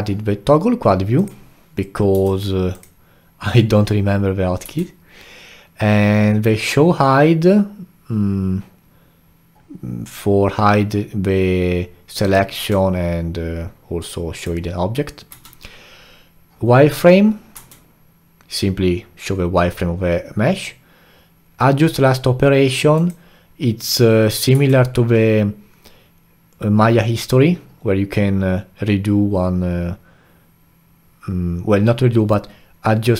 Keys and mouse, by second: 2.1 q, 4.6 q, 12.6 q, 15.3 q, 17.5 q, 24.5 q.